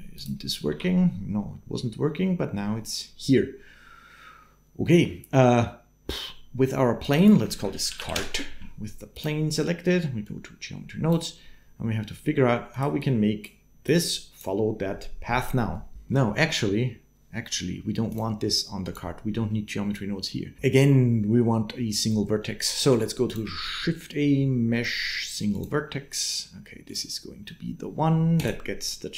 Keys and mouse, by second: 0.5 n, 7.0-8.4 drag, 8.9-10.1 drag, 12.5 click, 12.9 click, 13.6 click, 18.7 click, 23.4 shift+a, 28.2 click, 29.0 click.